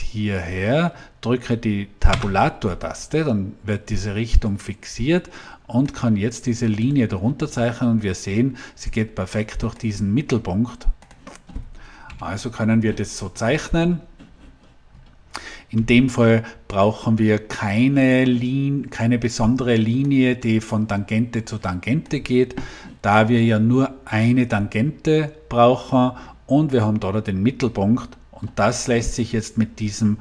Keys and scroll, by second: 2.0 Tab, 12.0 Delete.